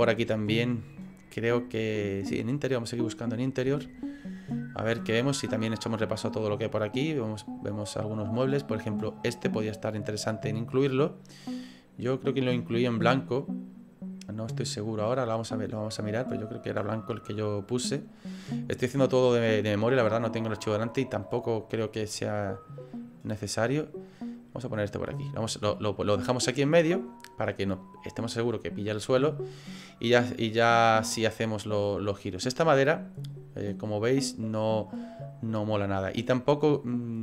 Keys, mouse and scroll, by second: 2.4 click.